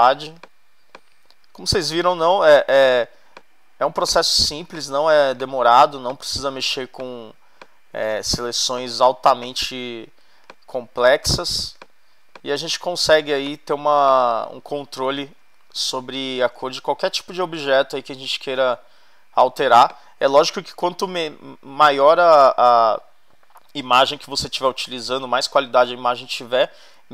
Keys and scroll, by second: 15.2 super+-, 16.4 super+-, 18.2 super+-.